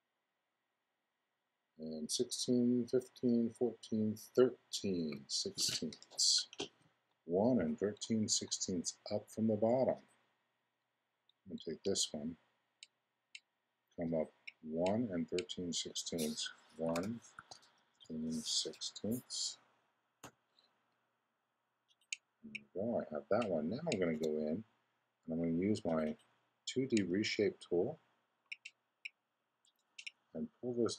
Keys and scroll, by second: 16.7 i, 19.0 6, 20.2 Return, 24.1 x.